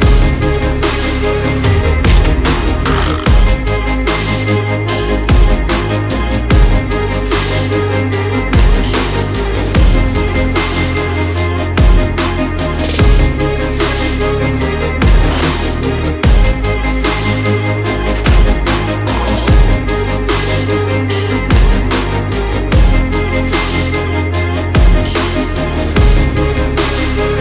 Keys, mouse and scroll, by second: 5.4 KP_7, 6.7 Tab, 9.8 Tab, 11.6 x, 12.5 shift+a, 15.1 t, 16.5-19.9 drag, 19.9 Tab, 22.4 z, 22.8 a, 25.6 click, 25.6 b, 26.8 c.